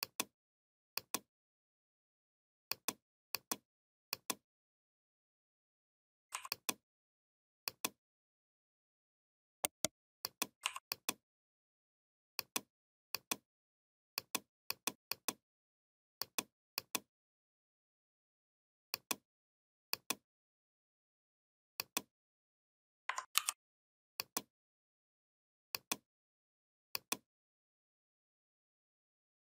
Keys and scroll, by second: 23.2 ctrl+g.